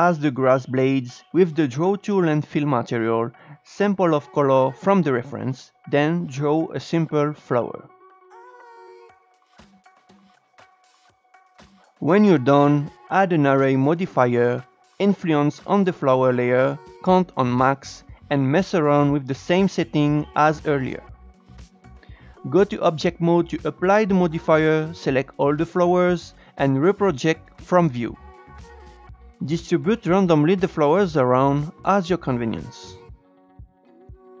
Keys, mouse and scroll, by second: 0.6-1.1 scroll up 2, 1.1 shift+middle click, 2.1 scroll up 1, 2.4-4.2 shift+middle drag, 4.2 e, 6.8-7.2 scroll up 1, 7.2 shift+middle click, 7.8-8.3 scroll up 1, 8.3-9.4 drag, 9.4 scroll down 3, 9.6 Tab, 9.7 scroll up 3, 9.9-11.4 drag, 11.4 Tab, 11.5-17.5 drag, 17.6-18.9 drag, 18.9-19.5 scroll down 3, 19.5-20.8 drag, 20.8 scroll down 2, 21.0-22.1 scroll up 11, 21.2 shift+middle drag, 22.1 Tab, 23.4-24.1 drag, 24.1 Tab, 24.7 a, 26.3-28.9 right drag, 28.9 scroll down 9, 29.0 g, 30.9 shift+right click, 31.4 shift+d, 31.9 s, 33.3 Tab, 33.8 scroll up 5, 33.8 shift+middle click, 33.9 Tab, 34.0 click, 34.1 click, 34.2-34.4 typing.